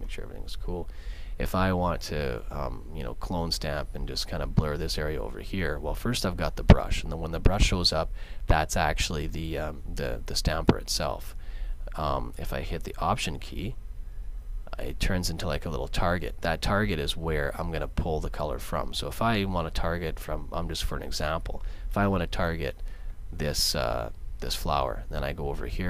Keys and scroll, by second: 0.1 super+d.